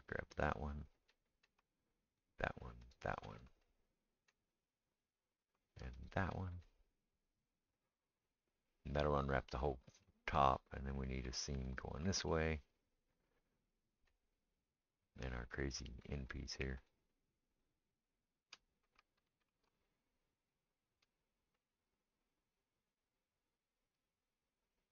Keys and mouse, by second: 2.2 shift+click, 2.2 shift+middle click, 2.8 shift+click, 6.0 shift+click, 7.9 middle click, 7.9-21.6 right drag, 11.7 shift+click, 16.4 shift+click, 16.4 shift+middle click, 17.5 shift+click, 17.5 shift+middle click, 19.2 ctrl+z, 21.6-24.1 middle drag, 24.1-24.9 right drag.